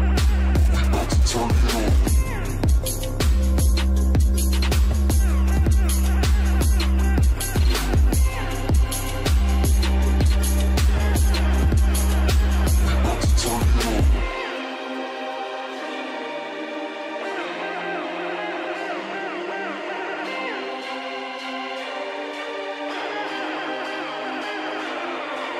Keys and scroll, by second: 1.1 ctrl+x, 1.5 ctrl+f, 4.7 |, 7.6 |, 10.9 |, 18.6 ctrl+space, 19.6 ctrl+space, 24.0 ctrl+r.